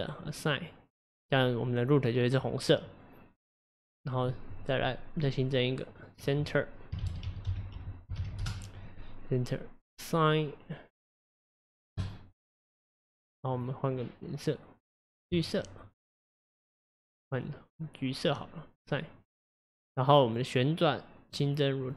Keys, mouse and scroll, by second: 3.8 click, 5.5-9.2 drag, 12.0-13.6 drag, 15.4-16.0 drag, 18.3-20.4 drag, 21.4 click.